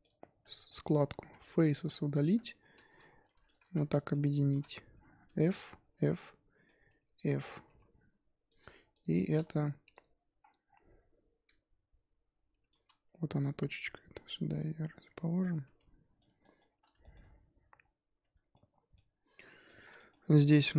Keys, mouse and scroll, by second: 0.0 click, 0.5 shift+click, 0.7-1.2 shift+middle drag, 1.2 x, 2.4-3.2 shift+middle drag, 3.2 2, 3.4 click, 3.9 shift+click, 4.1-4.6 shift+middle drag, 4.6-5.1 scroll up 1, 5.1 f, 5.5 click, 5.8 f, 6.0 scroll down 2, 6.1-6.9 middle drag, 6.9 f, 7.1-7.6 middle drag, 7.6 3, 8.4 click, 8.9 shift+click, 9.9 click, 11.7 a, 11.8-13.0 scroll up 2, 13.0 click, 13.4 g, 15.6 Tab, 16.2 click, 16.4 middle drag, 16.6-17.0 scroll up 1, 17.0 shift+middle drag, 17.2-18.3 shift+scroll up 2, 18.5-20.2 middle drag, 20.2 scroll up 1, 20.4 click, 20.7 middle click.